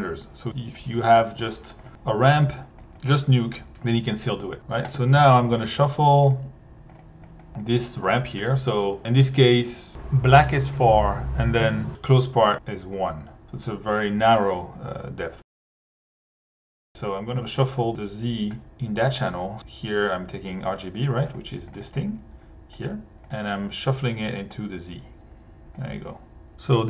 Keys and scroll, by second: 1.8 1, 3.9-6.1 typing, 8.1 1, 16.0 1, 22.8 1, 23.4 1.